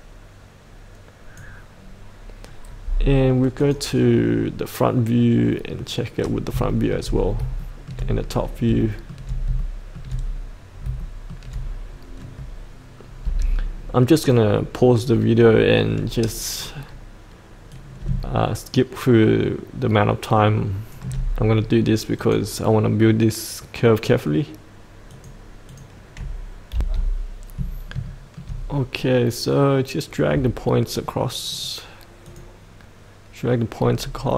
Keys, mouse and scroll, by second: 6.2 scroll up 1, 6.7 shift+middle click, 7.2 scroll up 1, 7.6 shift+middle click, 8.2-8.6 scroll down 1, 8.8 shift+middle click, 9.5 shift+middle click, 10.7 scroll up 1, 11.0 shift+middle click, 13.2 F8, 17.7 click, 18.5 click, 26.7 F8, 27.4 scroll down 1, 28.1 shift+middle click, 31.5-33.3 drag, 34.0-34.3 scroll down 1.